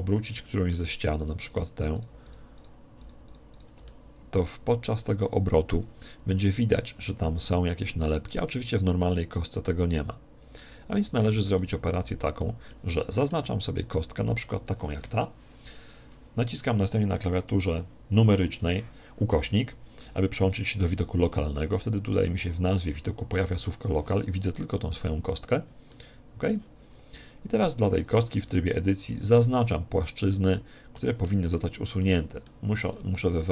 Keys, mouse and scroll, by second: 0.3-2.0 middle drag, 3.9-5.5 middle drag, 7.5 click, 11.1 ctrl+z, 11.6-14.7 middle drag, 13.7 right click, 17.3 KP_Divide, 20.1-22.0 scroll up 1, 22.0 scroll up 1, 22.1-24.5 scroll down 1, 24.5-28.8 middle drag, 28.1 Tab, 29.1 right click, 29.7-33.5 middle drag, 33.3-33.5 right drag.